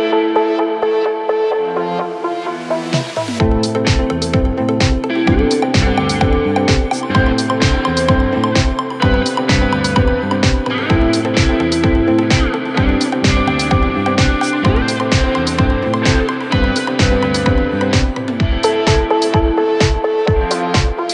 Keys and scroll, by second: 3.8 Escape, 9.7 Escape, 20.4 f.